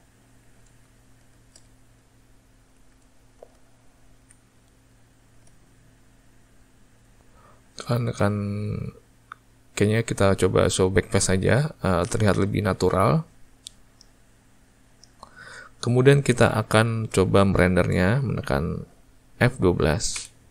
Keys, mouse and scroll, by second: 6.9 click, 14.4-20.5 ctrl+middle drag.